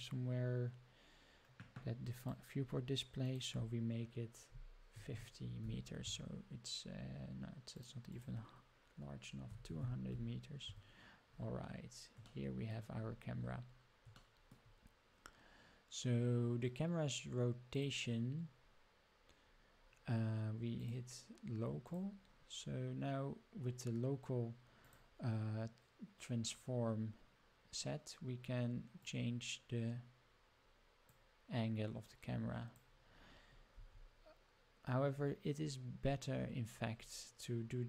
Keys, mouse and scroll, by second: 0.9 scroll down 3, 1.7-2.1 scroll down 1, 2.1 click, 2.5 scroll down 2, 3.2-6.9 drag, 7.7 click, 8.0-11.2 drag, 9.7 0, 11.7 scroll down 2, 12.2-12.7 shift+middle drag, 12.9-13.4 scroll up 5, 13.6-14.0 scroll down 3, 13.7 middle click, 14.1 shift+middle click, 14.7-15.5 scroll up 6, 17.7 click, 18.9 scroll down 1, 19.0 scroll up 1, 19.1 middle click, 19.6 scroll down 1, 19.8 middle click, 20.7-22.2 drag, 24.8-27.6 drag, 28.9-31.0 drag, 32.0 click.